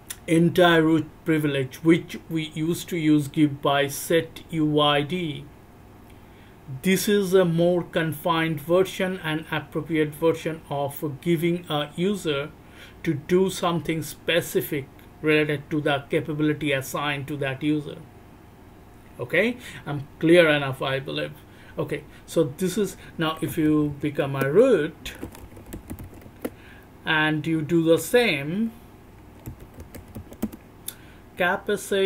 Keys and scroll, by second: 23.5 r, 23.6 r, 23.8 r, 24.2 Return, 25.2-26.0 s, 26.2 Return, 29.4 c, 29.6 c, 29.9 c.